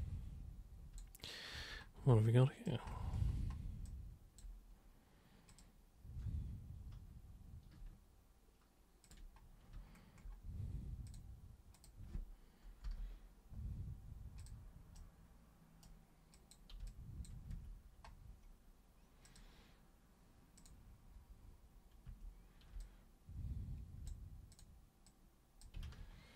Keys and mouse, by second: 1.5 super+1, 2.2-2.6 alt+super+drag, 3.9 alt+super+click, 5.4 super+click, 9.0 ctrl+super+click, 11.1 super+click, 11.7 super+click, 12.8 super+Return, 14.4 super+click, 15.0 super+right click, 16.3 super+click, 16.8 alt+super+click, 17.5 super+w, 19.2 super+click, 20.5 super+click, 22.0 super+3, 22.8-24.0 alt+super+drag, 24.5 super+click, 25.0-25.6 super+drag, 25.8 ctrl+super+z.